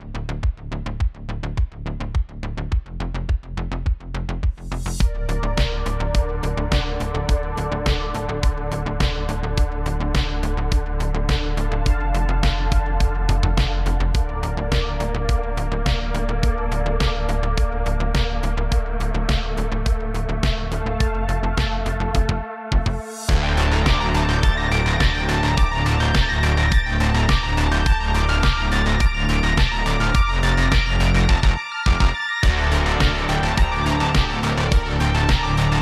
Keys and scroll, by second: 0.2 shift+f, 1.5 space, 1.6 space, 2.6 super+d, 3.1 super+d, 3.9 shift+f, 5.5 shift+d, 5.6 shift+d, 6.3 super+z, 6.3 super+z, 6.4 super+z, 7.1 super+d, 7.5 super+d, 8.1-9.4 typing, 11.9 super+i, 14.5 super+z, 15.1 space, 15.3 super+z, 15.6 super+i, 16.8 super+z, 17.3-19.0 typing, 22.7 shift+space, 24.7 2, 24.7 Return, 26.4 space, 26.7 space, 27.7 space, 28.8 space, 29.3 space, 34.7-35.8 typing.